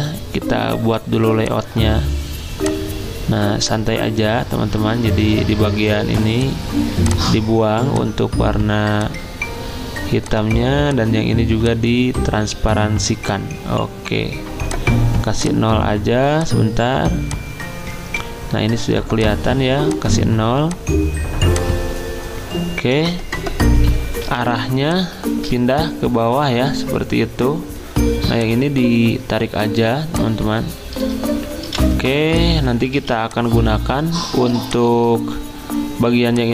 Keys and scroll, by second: 24.2 g, 31.6 v, 32.9 z, 34.5 t.